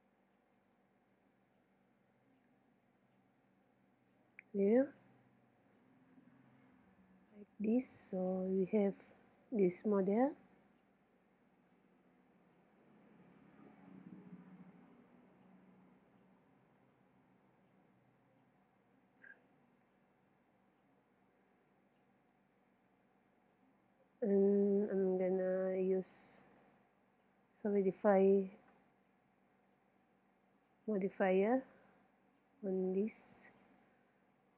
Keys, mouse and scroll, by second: 0.0 e, 4.4-6.2 drag, 5.5 KP_3, 6.4 middle click, 9.4-10.4 middle drag, 18.2-19.9 drag, 19.6 Tab, 21.7-23.4 drag, 22.9 z, 23.7-25.4 drag, 27.3-29.0 drag, 31.5-34.5 middle drag.